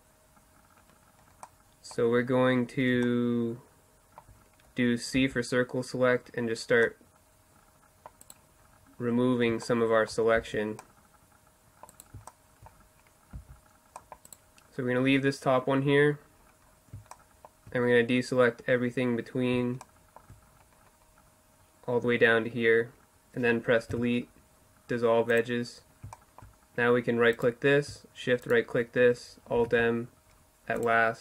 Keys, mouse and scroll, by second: 0.7-4.2 middle drag, 4.2 c, 7.3 right click, 7.7 middle click, 8.2 right click, 8.7 middle click, 8.8 right click, 8.9 middle click, 9.4 c, 11.4 middle click, 12.4 c, 15.6-19.2 middle drag, 19.7-22.2 middle drag, 23.0 Delete, 25.6 click, 26.4-27.6 middle drag, 27.6-29.4 right drag, 28.7 alt+m, 30.5 middle click, 31.0 Tab.